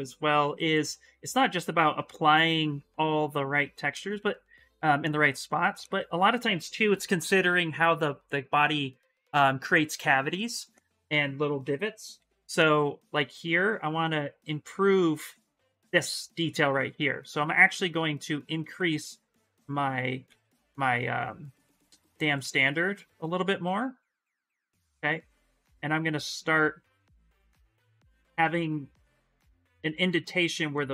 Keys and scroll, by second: 11.4-12.6 typing, 16.5 space, 17.7 space, 20.0 ctrl+z, 20.3 s, 21.9 ctrl+z, 22.2 space.